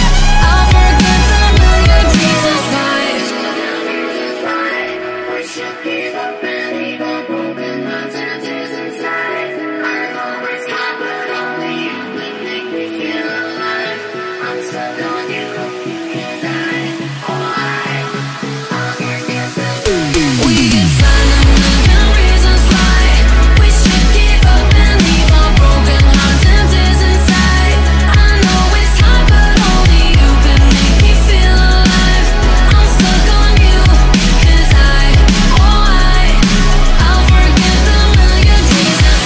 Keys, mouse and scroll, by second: 0.1 click, 0.4 scroll down 2, 0.7 scroll up 2, 0.9 middle click, 1.3 click, 2.0-5.0 drag, 5.0-6.8 middle drag, 9.6 middle click, 10.2-12.0 drag, 12.0-13.7 middle drag, 13.7 scroll down 2, 14.0-14.4 scroll up 3, 14.4-14.9 scroll down 1, 14.9 scroll up 2, 15.2-16.2 scroll down 1, 16.5-17.5 drag, 17.5 g, 19.2 ctrl+z, 19.3-21.5 drag, 21.7 g, 23.7 click, 24.5 shift+d, 25.6 click, 25.8 middle click, 26.6 click, 26.9 middle click, 27.2 click, 27.5-29.3 middle drag, 31.1 click, 31.5-32.6 scroll up 2, 32.6-33.5 scroll down 10, 33.5-35.3 drag, 35.5 click, 36.5-37.6 middle drag, 37.6-39.2 scroll up 6.